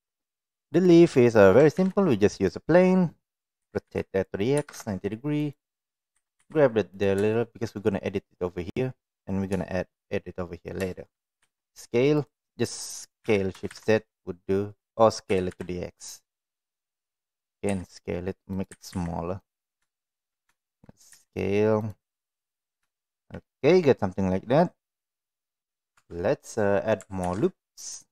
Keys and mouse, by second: 1.7 shift+a, 3.6 r, 6.1 g, 7.3 shift+middle click, 9.7 shift+middle click, 10.8 shift+middle click, 11.3 s, 13.2 s, 15.2 s, 17.6 s, 18.6 g, 19.9 shift+middle click, 21.1 s, 22.9 shift+middle click, 25.9 Tab, 27.2 ctrl+r.